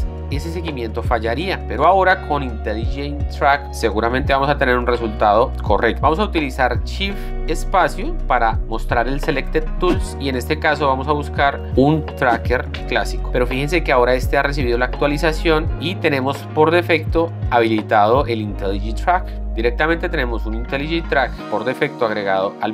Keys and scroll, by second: 8.0 shift+space, 12.8 Return.